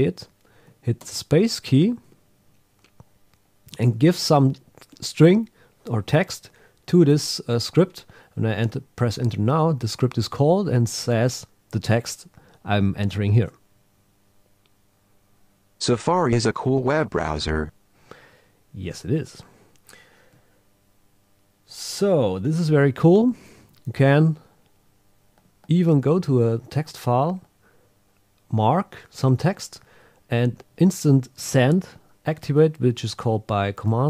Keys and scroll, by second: 13.4 Return.